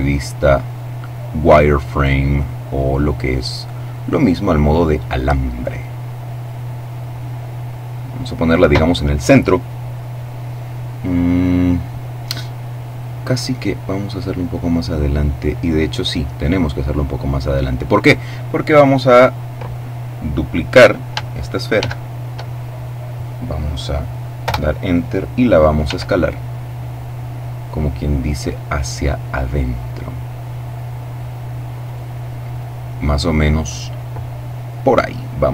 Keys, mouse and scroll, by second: 0.8-1.3 scroll up 1, 1.4 click, 4.8-6.7 drag, 6.9-8.9 drag, 13.1-17.7 drag, 18.5 right click, 21.6 shift+d, 24.2 Return, 25.7 s, 31.6 click.